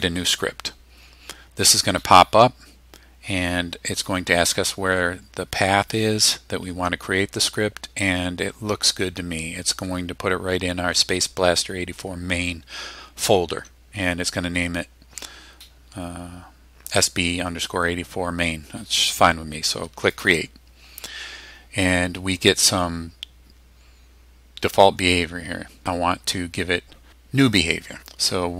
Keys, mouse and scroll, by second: 20.1 click.